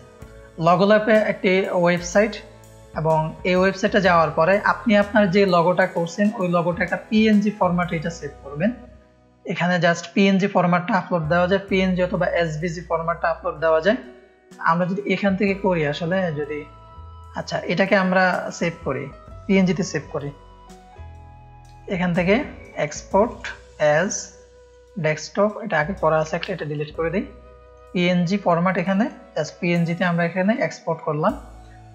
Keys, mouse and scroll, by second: 2.6 scroll down 1, 12.3 scroll down 1, 14.8 click, 16.6 click, 17.2 click, 17.5 click, 18.1 click, 18.2 ctrl+space, 18.4 ctrl+click, 18.7 click, 19.2 click, 21.8-22.9 drag, 24.6-26.1 drag, 26.2 Delete, 26.4 Return, 27.6 click, 30.3 click, 31.5-31.9 drag.